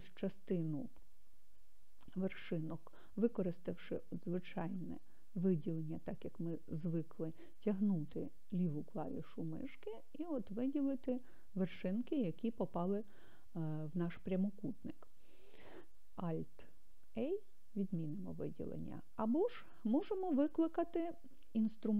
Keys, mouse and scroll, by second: 4.3 click, 5.2-10.1 drag, 17.4 alt+a, 19.2-21.9 drag.